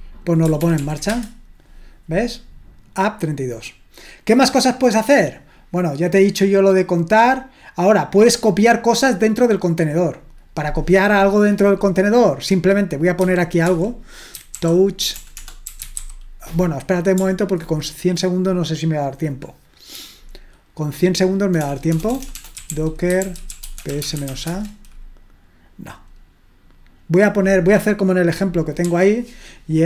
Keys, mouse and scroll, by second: 0.6 ctrl+p, 0.8 ctrl+p, 1.1 Return, 3.8-7.2 scroll down 2, 7.2-9.7 scroll down 1, 9.7-13.7 drag, 13.4-16.5 typing, 21.6-24.8 typing, 28.9 typing.